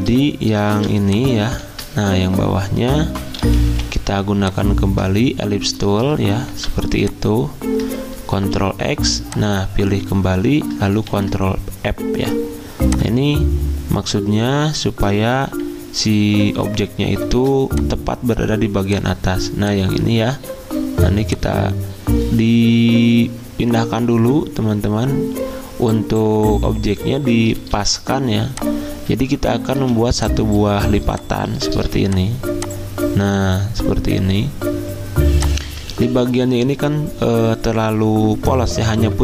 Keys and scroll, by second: 4.2 ctrl+z, 4.2 i, 6.5 v, 8.5 ctrl+x, 11.1 ctrl+f, 15.5 x, 20.3 v, 27.6 d, 29.8 z, 31.1 v, 35.9 ctrl+z.